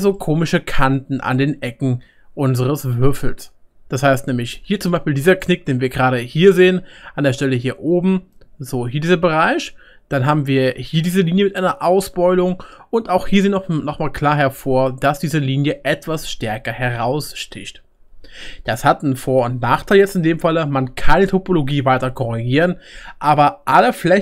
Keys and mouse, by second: 4.8 1, 5.2 click, 5.2 middle click, 5.2-11.1 right drag, 5.9 2, 8.1 1, 8.5-11.1 drag.